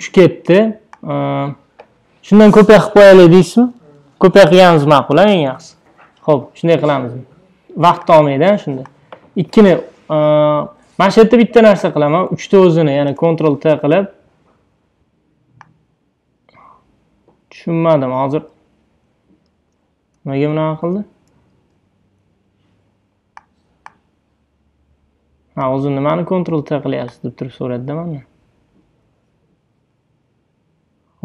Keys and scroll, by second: 13.1 super+t, 19.5 super+d, 20.7 super+z, 21.7 ↻.